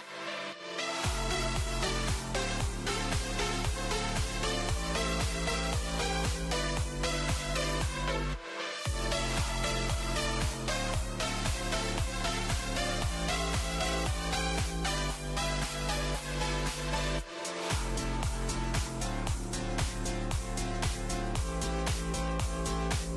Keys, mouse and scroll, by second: 1.9 middle click, 3.0 middle click, 3.2 middle click, 3.3 middle click, 3.5 click, 4.1 click, 5.1 click, 5.3 click, 12.2 click, 12.3 n, 12.6 middle click, 13.3 KP_0, 16.1 click, 16.8-17.1 middle drag, 17.1-17.7 scroll down 10, 17.7 middle click, 18.5 click, 19.5 click, 20.9 KP_0.